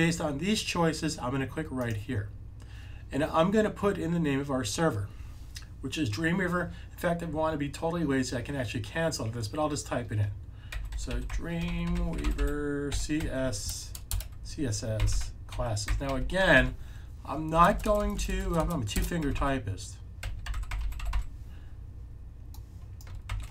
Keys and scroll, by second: 10.6-21.0 typing, 23.1 super+x.